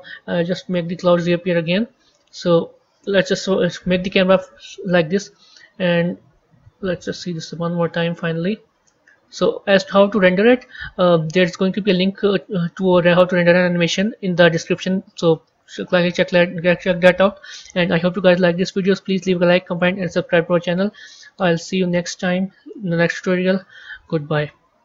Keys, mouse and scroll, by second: 0.8 click, 2.9 KP_0, 4.3 a, 6.1-10.9 drag, 12.2 click, 14.5 click.